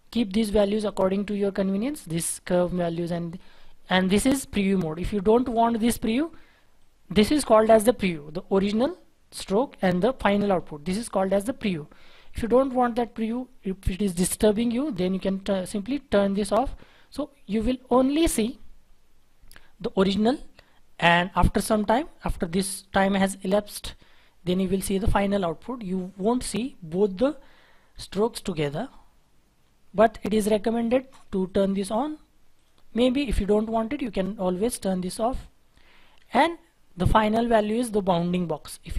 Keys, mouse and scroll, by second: 7.5-8.2 scroll up 1, 14.5 Delete, 16.9-17.9 scroll down 1, 19.1-22.1 scroll up 1, 28.7-29.5 scroll down 1, 36.0 Delete.